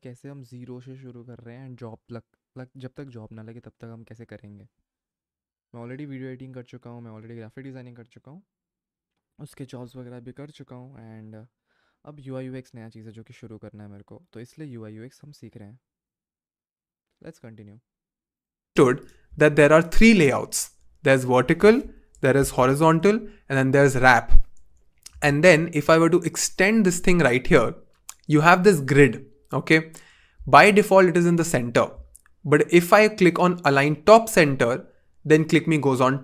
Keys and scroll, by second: 22.6 alt+super+b, 25.4 v.